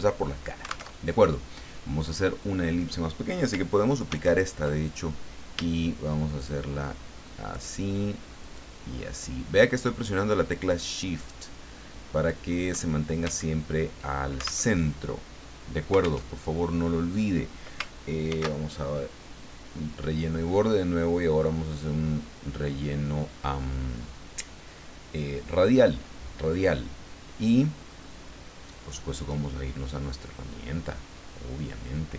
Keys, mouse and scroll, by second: 0.9 alt+Tab, 4.1 ctrl+d, 5.7-7.9 shift+drag, 8.5-12.6 shift+drag, 13.3-13.8 ctrl+scroll up 4, 14.7 alt+Tab, 16.2 alt+Tab, 18.3 ctrl+shift+f, 21.7 click, 29.2 click.